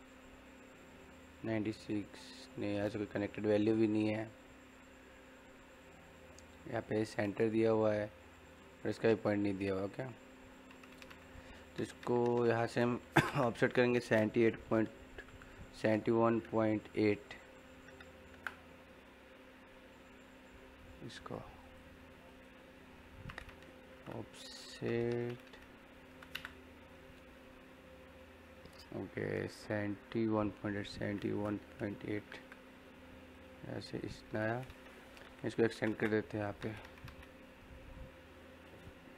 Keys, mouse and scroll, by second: 9.9-12.9 middle drag, 12.9 o, 13.2 space, 21.5 click, 23.6-24.4 typing, 26.3 space, 33.2 click, 35.2-35.7 typing, 36.2 click, 37.5 scroll up 1.